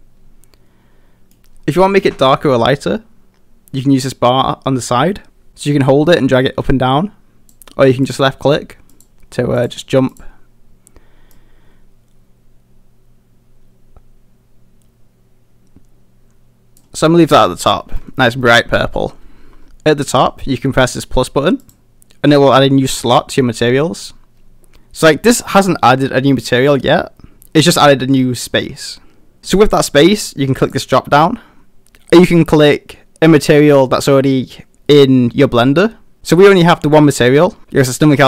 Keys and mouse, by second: 18.0 middle click, 18.4 middle drag, 31.2-38.2 drag.